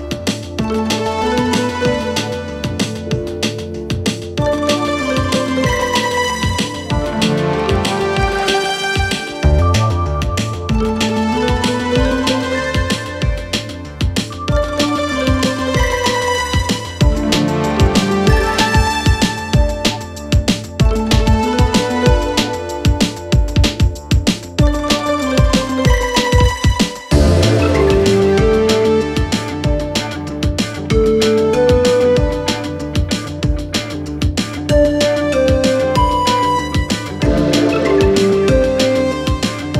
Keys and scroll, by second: 7.3 F1, 10.7 4, 13.3 5, 15.0 4, 17.3 6, 18.1 5.